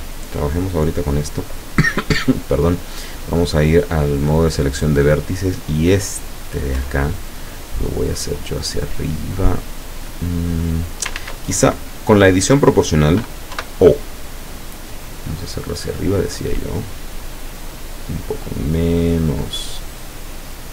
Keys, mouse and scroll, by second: 3.9 click, 5.1 right click, 6.3-6.7 scroll down 2, 8.1-11.2 drag, 11.2 ctrl+z, 13.6 o, 14.9 click, 15.7-16.1 scroll up 1, 16.3-16.7 scroll up 1, 18.0 scroll down 1, 19.7 scroll down 1.